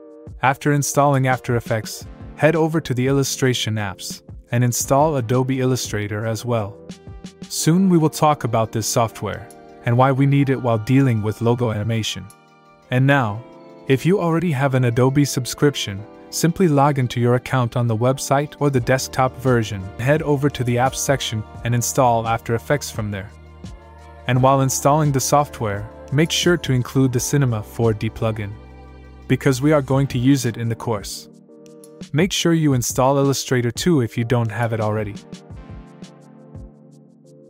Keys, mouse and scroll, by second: 2.2-3.6 scroll up 1, 3.6 click, 4.3-5.2 scroll down 1, 13.6 click, 14.5 click, 17.2 click, 19.7 click, 21.2 click, 22.4 click, 25.5 click, 29.2 click, 33.4 click.